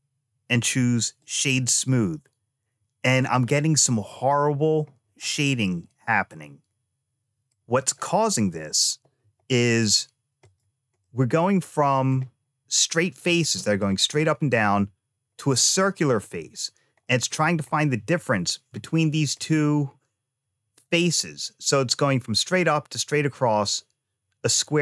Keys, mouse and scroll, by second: 5.1-7.4 middle drag, 10.3 click, 10.9-12.0 middle drag, 13.2 middle click, 14.1 middle click, 16.9 middle click, 17.6-18.5 scroll up 2, 18.7 ctrl+middle click.